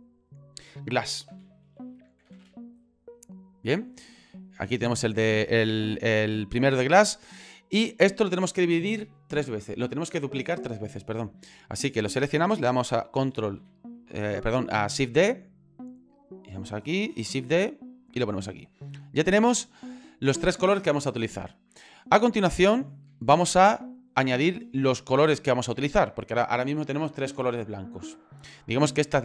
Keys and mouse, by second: 2.4 s, 5.1-6.2 middle drag, 6.4 click, 7.7 click, 13.6 shift+d, 17.1 shift+d, 21.8 ctrl+middle click, 23.3 shift+middle click.